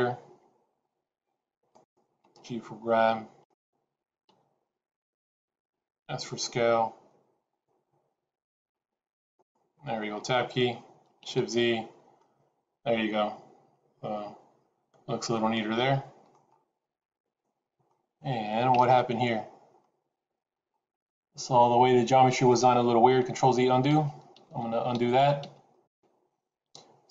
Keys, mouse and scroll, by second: 2.1 g, 4.2 g, 5.9 s, 9.6-10.9 scroll down 3, 10.0 Tab, 11.2 shift+z, 11.7-12.0 scroll down 2, 12.0 middle click, 16.4-16.9 scroll up 4, 16.9 middle click, 18.7 Tab, 19.7 middle click, 20.6-21.3 scroll up 2, 21.3 middle click, 23.2 ctrl+z, 23.2 scroll up 1, 23.9 ctrl+z, 24.3 ctrl+z, 25.4 ctrl+z.